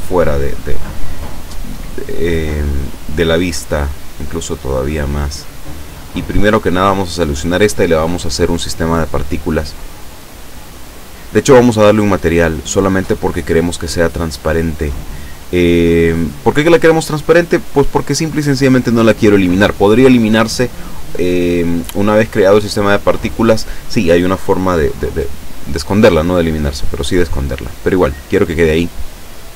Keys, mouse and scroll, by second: 1.0-1.5 scroll up 1, 1.6 scroll down 1, 2.4-2.9 scroll down 1, 4.0-5.1 drag, 5.6-6.1 scroll up 1, 7.0 right click, 11.5 click, 12.5 click, 14.3 click, 26.4 click, 28.4 click.